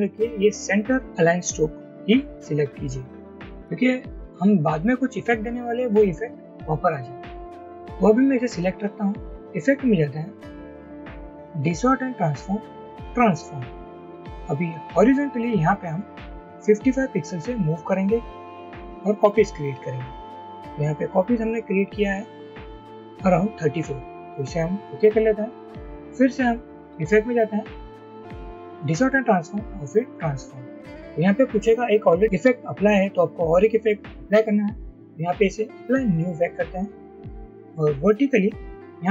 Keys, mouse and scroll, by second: 16.6-17.4 typing.